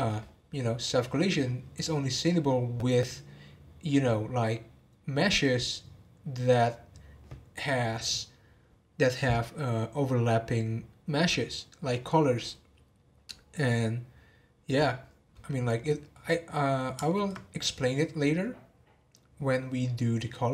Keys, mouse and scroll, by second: 1.7-4.9 middle drag, 16.3-19.5 middle drag.